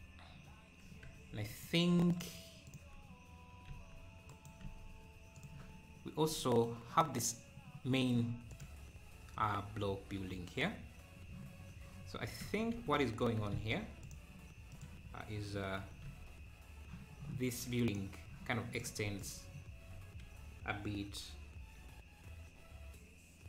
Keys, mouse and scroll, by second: 1.3 Tab, 1.5-3.7 drag, 3.7 r, 5.5 Tab, 5.9-6.3 scroll up 4, 6.3 middle click, 7.0-7.5 scroll down 1, 7.5-8.2 scroll down 2, 8.5-9.9 drag, 9.9 KP_7, 11.3 `, 12.0 scroll up 2, 12.4 Tab, 14.8 ctrl+r, 17.9-19.5 drag.